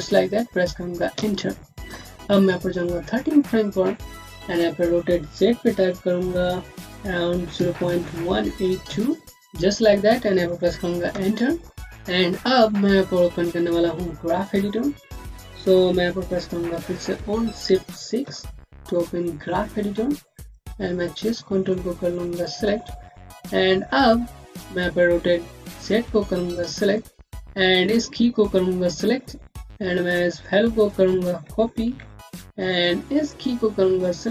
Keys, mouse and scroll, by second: 1.0 Return, 2.9 click, 11.0 Return, 16.6 click, 18.1 6, 19.6 click, 21.2 alt+scroll up 1, 21.3 alt+middle click, 22.4 click, 22.8 scroll down 1, 23.2 alt+middle click, 24.3 click, 30.5 click, 31.7 ctrl+c, 32.7 click.